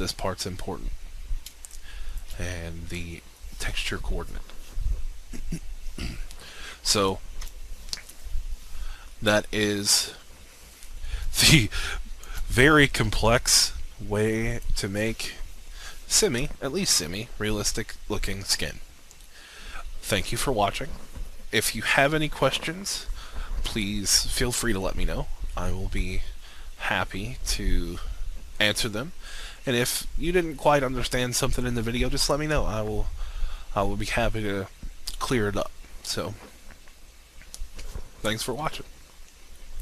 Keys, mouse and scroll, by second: 1.5 alt+shift+click, 5.1-6.6 scroll down 1, 6.9 alt+shift+click, 7.5-8.9 scroll down 1, 8.9-9.4 scroll up 1, 9.4-11.0 scroll down 1, 12.5-15.3 alt+shift+drag, 17.5-22.5 scroll up 1, 39.6 click.